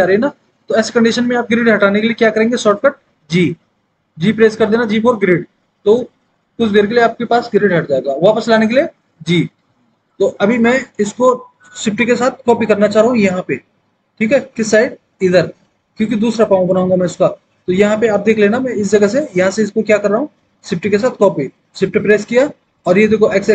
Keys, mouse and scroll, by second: 6.1 g, 17.4 alt+w.